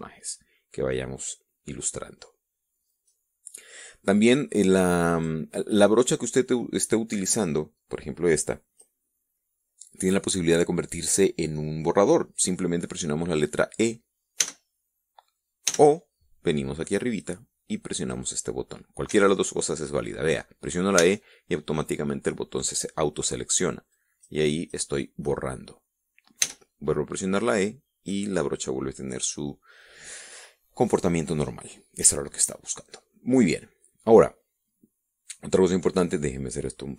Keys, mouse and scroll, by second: 5.6 click, 8.4-9.5 drag, 14.9 e, 16.2 e, 18.5 click, 19.6 e, 21.5 e, 24.4 click, 25.5 click, 27.0 e, 27.9 click, 36.7 click.